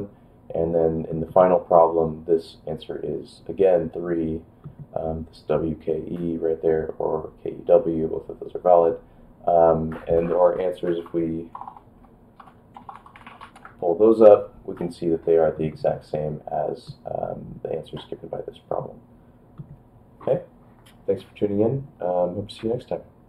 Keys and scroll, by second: 10.7-13.9 typing.